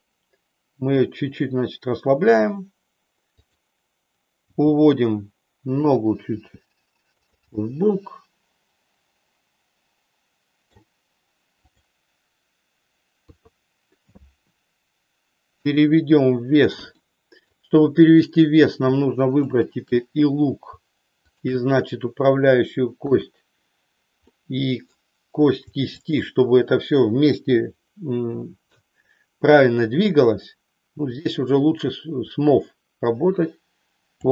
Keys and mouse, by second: 3.4 click, 4.5 g, 5.9 click, 6.3 g, 7.6-10.9 middle drag, 11.6 click, 13.1 KP_3, 17.0 middle click, 19.4 shift+click, 23.0 KP_1, 24.3 middle click, 25.9 shift+click, 28.1 KP_3, 32.1-34.3 drag.